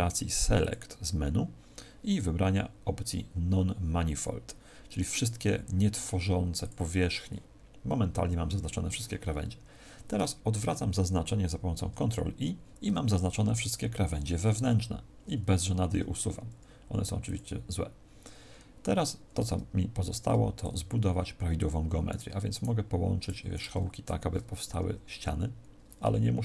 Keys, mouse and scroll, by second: 0.5 click, 11.7 ctrl+i, 19.8 ctrl+Tab, 22.0 right click, 22.4 shift+right click, 23.1 shift+right click, 24.5 f, 26.3 ctrl+z.